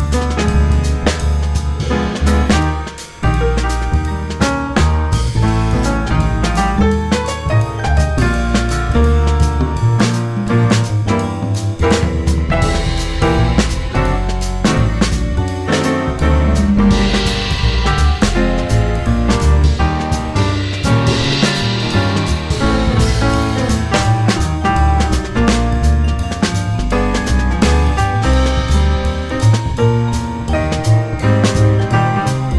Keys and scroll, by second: 1.0 ctrl+shift+e, 1.2 1, 2.0 F4, 3.0 F4, 4.1 F4, 4.7 F4, 6.8 F4, 7.8 F4, 9.0 F4, 10.1 F4, 13.8 2, 14.0 F4, 14.3 F4, 15.2 ctrl+r, 15.3 ctrl+c, 20.2 ctrl+z, 20.8 alt+c, 21.2 1, 21.4 alt+c, 25.9 ctrl+z.